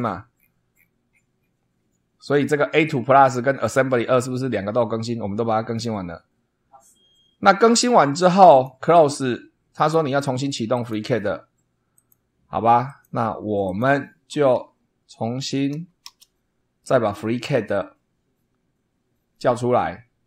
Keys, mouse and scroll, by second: 0.3-1.0 scroll down 4, 2.1 scroll up 2, 3.7-4.2 scroll up 2, 8.4 click, 10.7 click, 11.9 click, 12.8 click, 13.6 click, 15.7 Up, 16.0 Return.